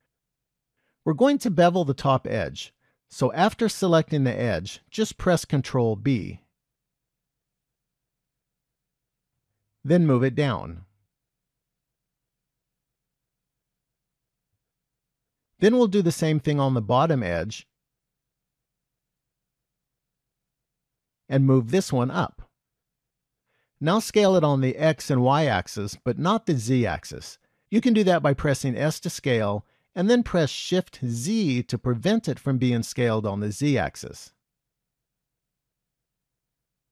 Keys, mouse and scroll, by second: 2.9 click, 5.5 ctrl+b, 11.1 g, 15.6 click, 17.4 ctrl+b, 21.1 g, 28.9 s, 35.6 middle click.